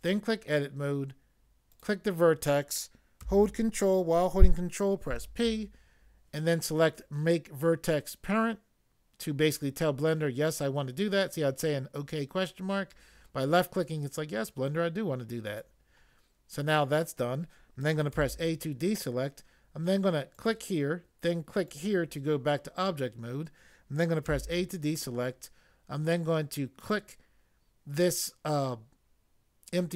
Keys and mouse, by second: 0.0 click, 1.7 click, 5.0 ctrl+p, 15.5 click, 18.2 a, 20.3 click, 21.7 click, 24.3 a, 26.8 click.